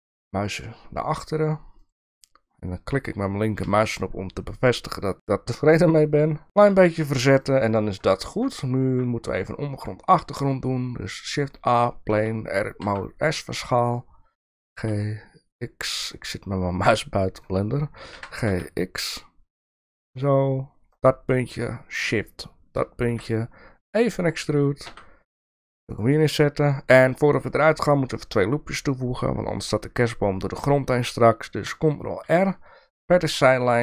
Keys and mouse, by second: 3.6 g, 7.3 click, 8.1 shift+middle drag, 8.8 shift+a, 12.1 Tab, 12.8 s, 14.5 g, 14.8 x, 18.1 g, 22.1 shift+click, 23.1 e, 32.2 ctrl+r.